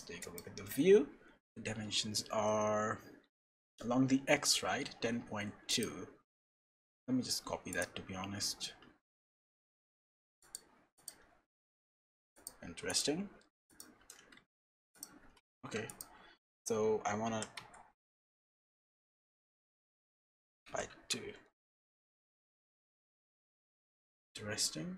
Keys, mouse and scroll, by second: 3.7-4.2 scroll down 5, 5.0 scroll down 1, 5.3 n, 5.7 click, 6.2 n, 7.7 click, 9.3-10.4 scroll down 3, 10.4 click, 10.4 scroll down 2, 11.9-12.4 scroll up 3, 12.3 click, 12.9 click, 15.6 Escape, 15.9 click, 16.3-17.2 scroll up 3, 17.2 g.